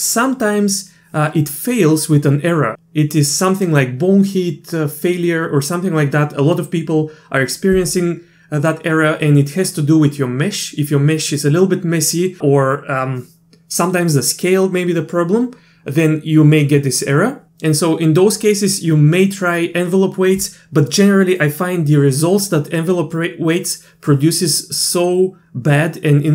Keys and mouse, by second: 21.0 typing.